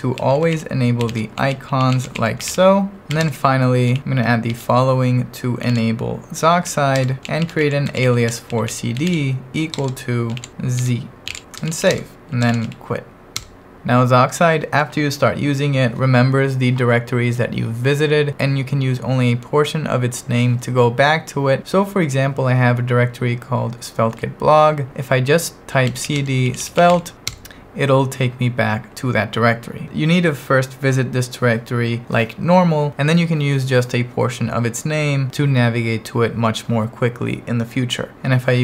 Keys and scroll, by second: 0.0-3.1 typing, 3.3 Return, 4.0 ctrl+1, 4.5 super+v, 5.4-13.1 typing, 10.4 ctrl+2, 13.4 Return, 25.6-27.4 typing.